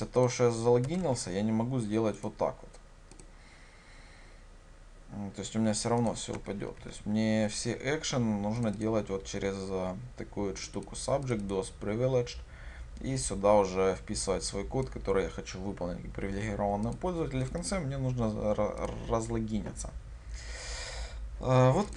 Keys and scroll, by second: 1.2 ctrl+v, 3.3 ctrl+shift+F10, 6.8 ctrl+y.